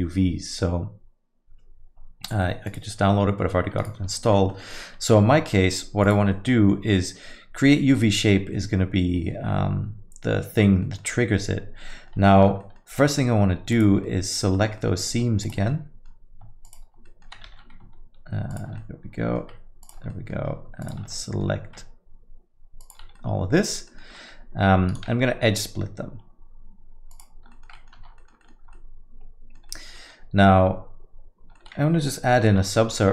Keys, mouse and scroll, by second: 4.1 alt+middle click, 4.3 middle click, 4.7 alt+middle click, 5.6 alt+middle click, 6.0 click, 6.3 alt+middle click, 10.8 middle click, 11.1 alt+middle click, 11.9 middle click, 12.4 Tab, 12.6 alt+middle click, 13.1 alt+middle click, 13.7 alt+click, 14.0 alt+middle click, 14.5 middle click, 14.8 alt+middle click, 15.4 alt+shift+click, 15.7 alt+middle click, 16.6 alt+shift+click, 17.0 alt+middle click, 17.4 ctrl+z, 18.5 shift+click, 18.8 alt+middle click, 19.8 shift+click, 20.1 alt+middle click, 20.8 shift+click, 21.1 alt+middle click, 22.8 ctrl+click, 23.1 alt+middle click, 24.1 alt+middle click, 24.1 middle click, 24.9 right click, 27.5 alt+middle click, 27.7 middle click, 28.0 Tab, 28.2 alt+middle click, 28.4 middle click, 28.5 scroll down 1, 28.7 alt+middle click, 29.7 middle click, 29.9 alt+middle click, 31.5 middle click, 32.4 ctrl+1, 32.7 alt+middle click.